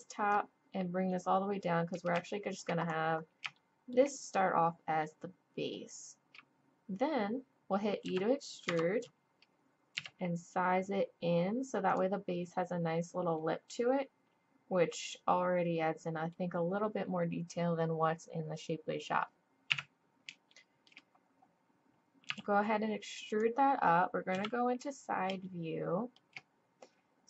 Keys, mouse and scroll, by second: 0.3-1.7 drag, 1.9 click, 2.2-5.6 middle drag, 5.6-8.0 drag, 8.0 e, 10.0 s, 13.4-15.6 middle drag, 19.7 KP_1, 22.3 e, 24.3 KP_3, 25.5 click.